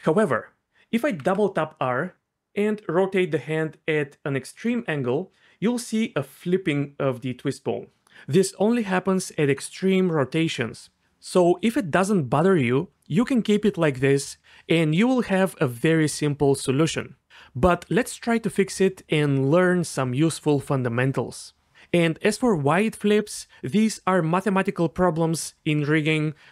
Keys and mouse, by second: 1.1 r, 1.3 r.